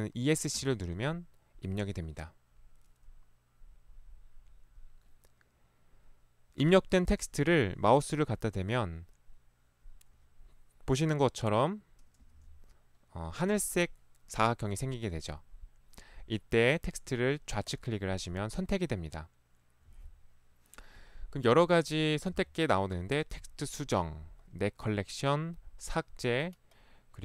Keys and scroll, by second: 0.7 Escape, 12.4 ctrl+1, 14.9 Escape, 15.1 ctrl+1, 22.3 ctrl+1.